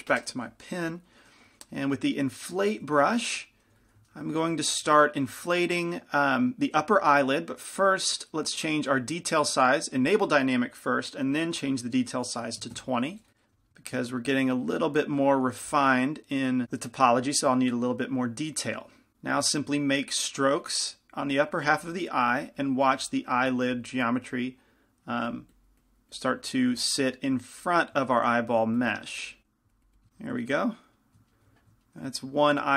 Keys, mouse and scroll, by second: 2.7 i, 2.7 f, 3.1-10.4 middle drag, 3.9 f, 4.9 shift+f, 10.4-13.6 drag, 13.6 f, 13.7 middle click, 17.4 f, 19.1 ctrl+z, 19.1-31.8 drag, 30.3-32.5 middle drag.